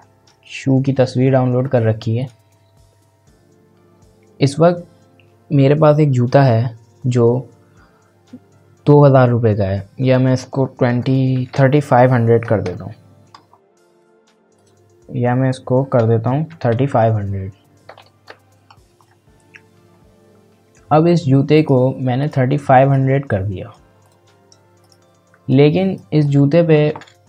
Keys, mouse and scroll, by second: 0.3-0.7 scroll down 1, 2.2 click, 10.0 click, 13.6-14.5 scroll down 1, 14.5 click, 19.0-20.6 scroll up 1, 20.6-21.2 scroll down 1, 21.5-26.2 drag.